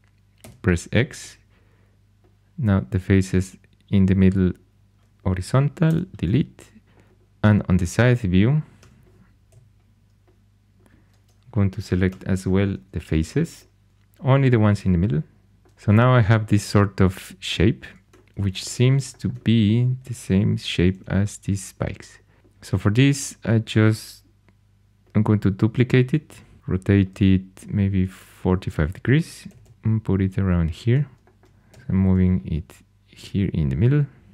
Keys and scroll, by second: 0.4 x, 5.8 x, 8.7 4, 9.4 g, 12.0 3, 18.0 4, 20.7 typing, 26.2 shift+d, 26.6 r, 29.4 typing, 31.7 g.